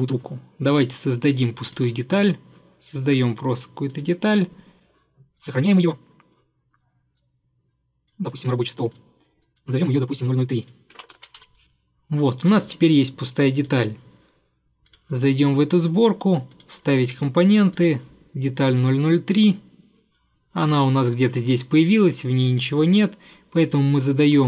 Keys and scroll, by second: 10.8-11.7 typing.